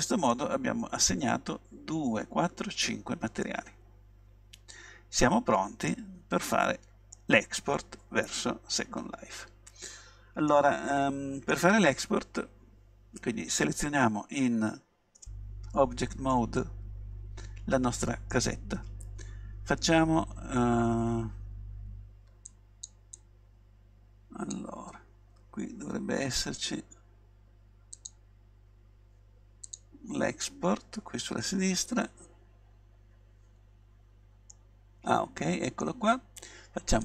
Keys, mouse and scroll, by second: 0.4-2.4 middle drag, 3.5-5.3 middle drag, 6.6-9.1 middle drag, 10.6-12.9 middle drag, 15.3 Tab, 16.4-18.3 middle drag, 34.6-36.5 middle drag.